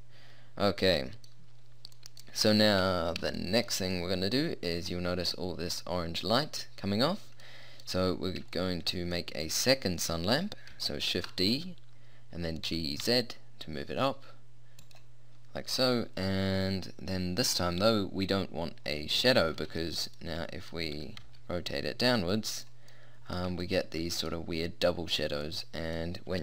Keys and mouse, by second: 3.6 middle click, 4.8-7.6 middle drag, 7.8 middle click, 11.2 shift+d, 20.7-22.1 middle drag, 21.0 r.